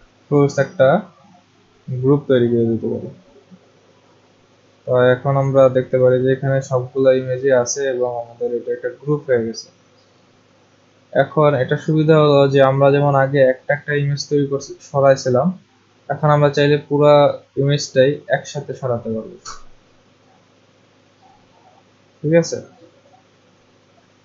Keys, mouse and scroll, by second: 1.9 click, 5.1 click, 10.4 click, 13.7-15.3 drag, 22.2 click, 22.9 click.